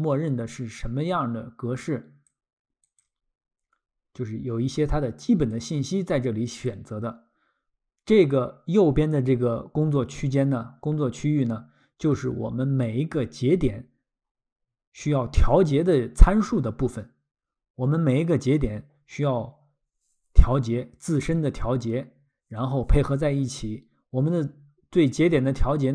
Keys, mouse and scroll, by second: 1.8 click, 2.8 click, 5.5 click.